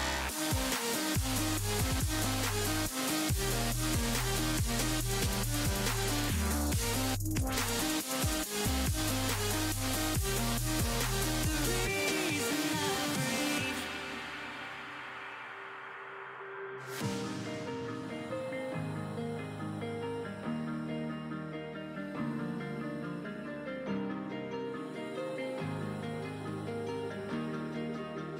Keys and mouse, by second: 11.2-13.8 drag, 21.4-25.0 drag, 25.0-27.1 middle drag, 27.8-28.3 drag.